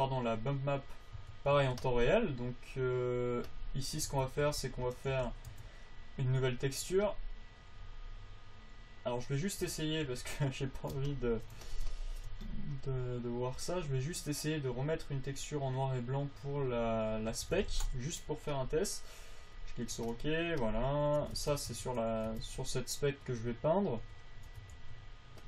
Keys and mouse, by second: 1.5 Tab, 1.9 Tab, 4.5 Tab, 4.8 Tab, 5.5 alt+g, 5.9 Tab, 10.4 t, 21.7 Tab, 22.1 Tab, 22.7 Tab, 24.6 click, 25.1 f.